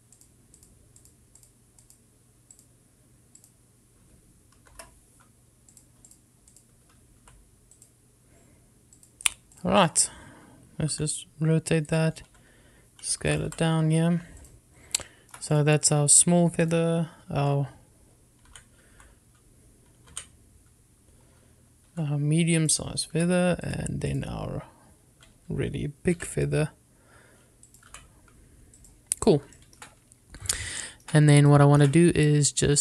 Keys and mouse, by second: 6.9 click, 7.2 click, 7.7 click, 8.3 x, 10.3 click, 10.7 click, 12.1 r, 13.0 click, 13.4 s, 14.5 click, 14.6 g, 15.6 click, 16.2 shift+middle click, 16.7 click, 17.8 click, 18.6 r, 19.6 Escape, 20.1 r, 21.3 Escape, 23.1 s, 23.7 click, 24.3 g, 24.8 click, 27.3 s, 28.8 click, 29.0 g, 29.9 click, 30.7 middle drag, 32.0 shift+middle drag, 32.6-32.8 shift+middle drag.